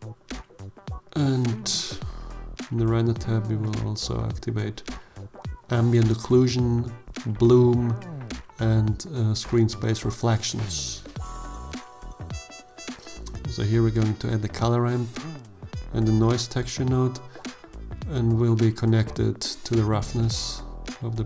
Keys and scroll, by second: 12.9 shift+a, 13.6 c, 14.0 o, 14.2 l, 16.8 shift+a, 17.7 n, 18.0 o, 18.2 i.